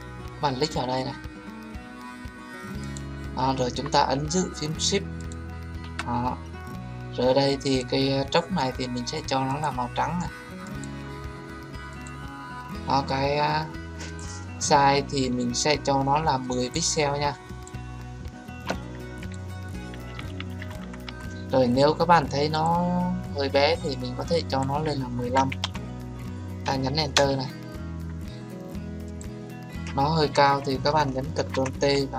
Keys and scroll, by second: 27.1 Return.